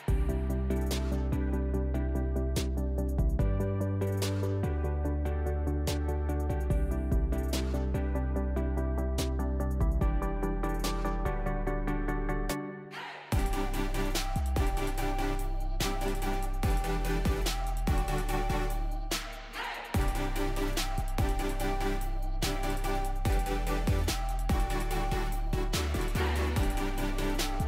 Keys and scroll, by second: 2.7-3.7 typing, 3.9 Return, 19.2-20.6 typing.